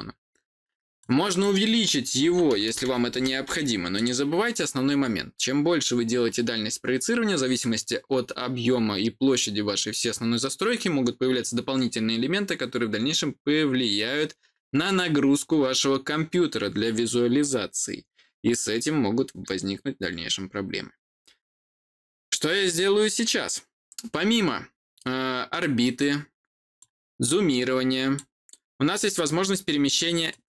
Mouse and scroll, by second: 0.9 click, 3.9 click, 25.9 click, 27.2 click, 30.2-30.4 drag.